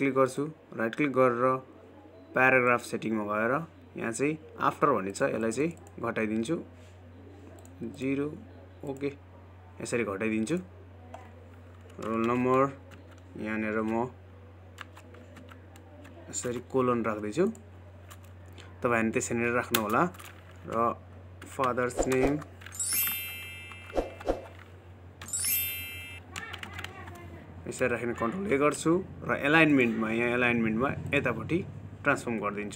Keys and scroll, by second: 29.5 ctrl+a.